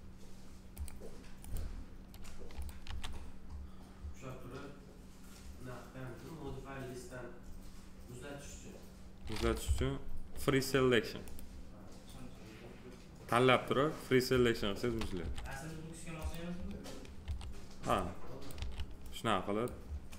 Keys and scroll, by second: 2.8 f, 9.6 p, 15.2 f, 17.2 r, 18.5 w.